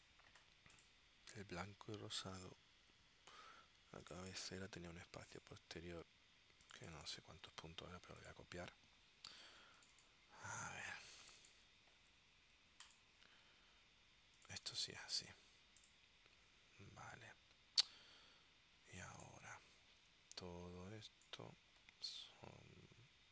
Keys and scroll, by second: 7.5 super+c, 15.3 super+v.